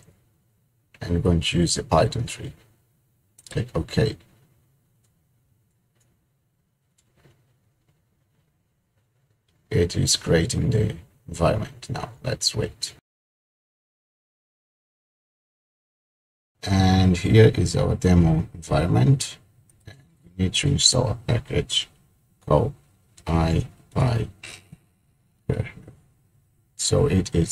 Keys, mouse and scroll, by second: 4.1 click, 19.8 click, 23.2-25.3 typing.